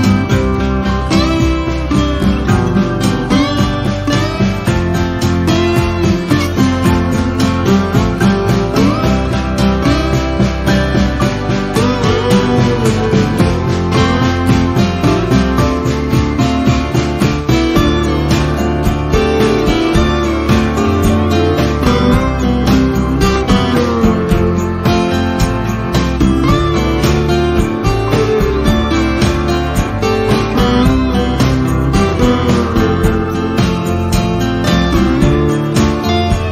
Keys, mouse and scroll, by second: 2.1 ctrl+alt+click, 3.0-3.9 drag, 5.8 ctrl+scroll down 1, 6.5 F1, 6.9 click, 7.4 ctrl+z, 7.8-8.2 ctrl+scroll down 2, 8.4 ctrl+d, 8.8-9.7 ctrl+drag, 10.4 ctrl+scroll down 1, 10.9-11.5 ctrl+click, 12.3 h, 12.9-13.8 click, 16.1 ctrl+shift+a, 17.1 click, 17.2 click, 18.9 =, 20.5 ctrl+shift+=, 21.0 F12, 22.2 shift+right click, 23.9-24.9 typing, 25.0-26.3 click, 26.3 F1, 26.7 ctrl+scroll down 2, 28.0-29.6 drag, 30.0 End, 30.7 ctrl+F1, 31.3 F1, 32.1 click, 32.5 ctrl+a, 32.8-34.6 typing, 34.6 Return, 35.9 ctrl+scroll down 2, 36.2-36.5 shift+right drag.